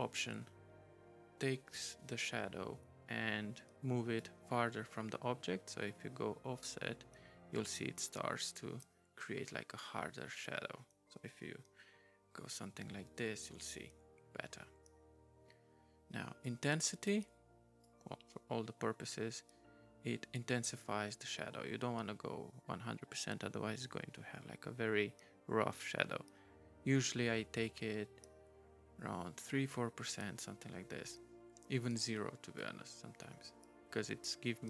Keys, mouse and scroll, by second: 4.2 right click, 9.8 right click, 16.4 right click, 17.8 right click, 32.6 right click.